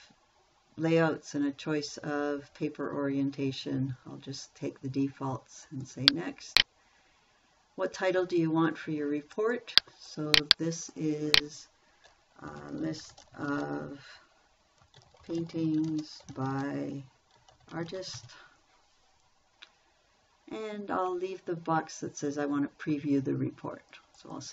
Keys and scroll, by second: 12.7-19.1 typing.